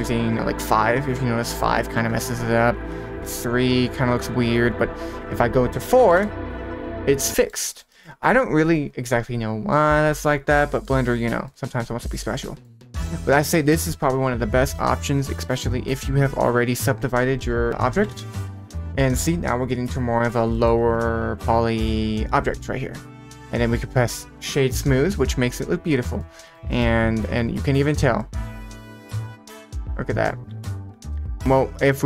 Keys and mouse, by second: 2.7 click, 4.4 click, 4.6 click, 5.2-6.2 drag, 7.3 middle click, 7.6 middle click, 7.9 middle click, 10.8 middle drag, 11.4-12.6 middle drag, 13.4-18.1 drag, 18.8-19.1 middle drag, 19.7-20.2 right drag, 20.5 middle click, 20.8-22.7 right drag, 23.1-23.9 middle drag, 26.2-26.5 middle drag, 26.7 middle click, 27.8 drag, 28.2-28.8 middle drag, 29.5-30.3 middle drag, 31.9-32.0 drag.